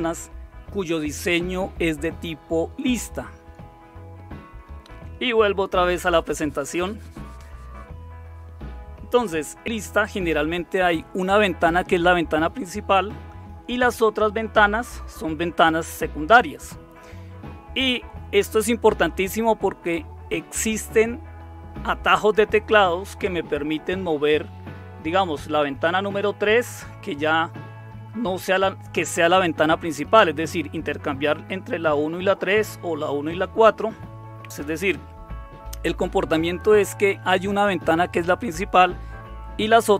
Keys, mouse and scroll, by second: 4.9 super+6.